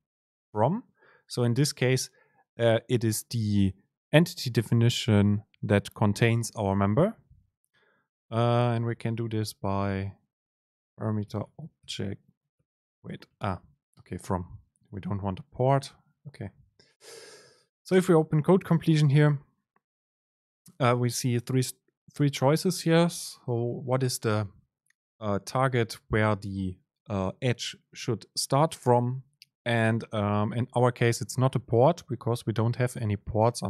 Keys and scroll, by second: 10.1 super+space, 14.0 BackSpace, 14.1 Return, 16.2 BackSpace, 17.8 super+space.